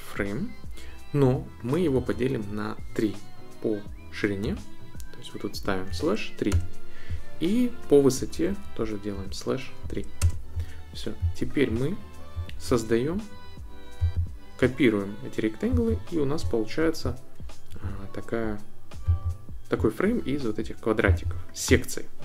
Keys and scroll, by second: 2.1 Right, 4.4 /, 5.9 3, 6.5 Return, 8.5 Right, 9.1 /, 9.8 3, 10.2 Return.